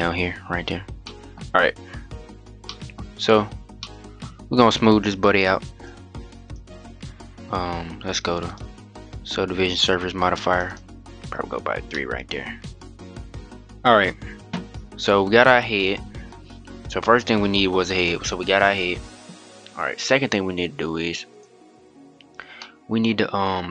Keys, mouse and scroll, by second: 0.3-0.8 scroll up 1, 0.8-2.8 middle drag, 2.8-3.5 scroll up 4, 3.5-4.1 shift+middle drag, 4.1-5.1 scroll up 1, 5.1-6.2 drag, 8.4-11.3 drag, 11.3-11.6 scroll down 4, 11.6-13.9 middle drag, 13.9 scroll up 1, 14.0-17.1 scroll down 1, 21.0-21.9 drag, 21.9-22.3 scroll up 3, 22.3-22.9 middle drag, 22.9-23.7 scroll up 1.